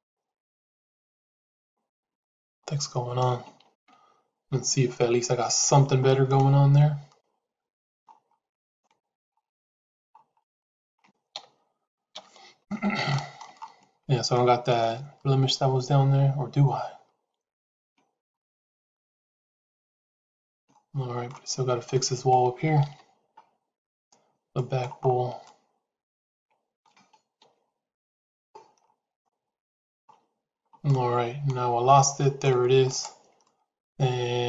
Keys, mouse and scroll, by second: 5.5 shift+z, 6.2-7.9 middle drag, 8.6 middle click, 10.4 middle click, 11.3 KP_1, 12.1 ctrl+KP_1, 13.0 shift+middle click, 14.2-18.1 middle drag, 18.6 click, 20.6 shift+middle click, 21.8 middle click, 24.0 shift+z, 24.4 middle click, 25.3-26.7 middle drag, 27.3 KP_7, 29.1 shift+middle click, 30.8-32.4 middle drag, 32.8 click, 33.4-34.4 middle drag.